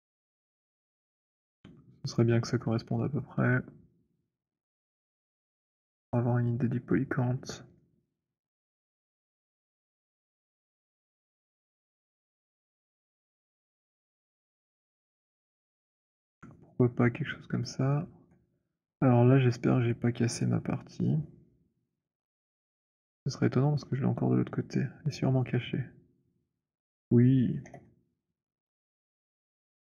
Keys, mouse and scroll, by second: 2.1 click, 4.8 middle click, 7.6 middle click, 15.7 middle click, 16.8-17.5 scroll down 6, 17.5 alt+middle click, 21.6 alt+middle click, 21.8 alt+click, 25.2 middle click, 26.7 click, 27.6 h, 29.4 click, 29.6 alt+middle click.